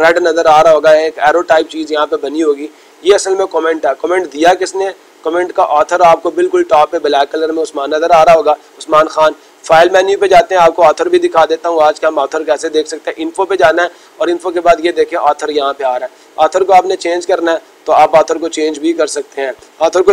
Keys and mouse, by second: 5.7-6.8 drag, 9.6-10.8 drag, 13.3-14.5 drag, 16.5-17.5 drag.